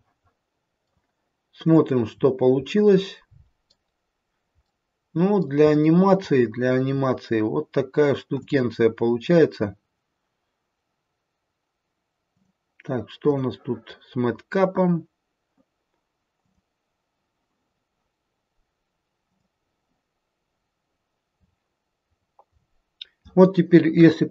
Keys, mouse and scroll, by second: 1.6 click, 2.1-4.1 scroll down 5, 2.6 middle click, 4.6 middle click, 5.7-7.5 scroll up 4, 8.5 click, 12.3 click, 19.4 click, 20.9-21.6 scroll down 2, 21.4-22.0 scroll up 4, 22.0-24.0 scroll down 3, 24.0-24.3 scroll down 1.